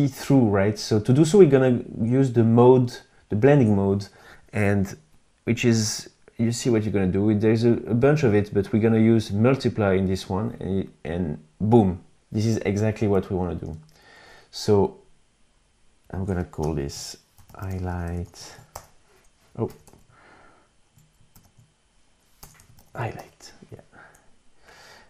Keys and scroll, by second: 13.0 v, 15.9 Return, 16.4-18.2 typing, 19.2 Right, 20.7 shift+h, 21.7 BackSpace, 22.0 shift+Left, 22.1 shift+h, 22.5 Return.